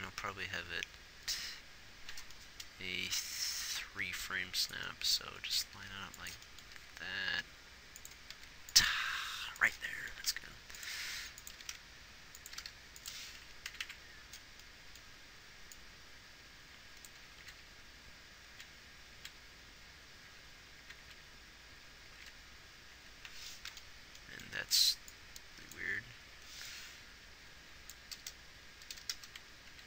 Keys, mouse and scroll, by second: 0.4 Left, 1.6 Left, 4.1 g, 6.1 g, 8.7 r, 9.4 g, 10.6 g, 11.4 r, 11.9 r, 12.9 g, 14.1 Right, 14.2 Right, 17.7 Left, 17.9 Left, 19.6 Right, 20.7 Left, 21.3 Right, 21.5 Right, 22.7 Left, 23.3 Left, 28.5 KP_0.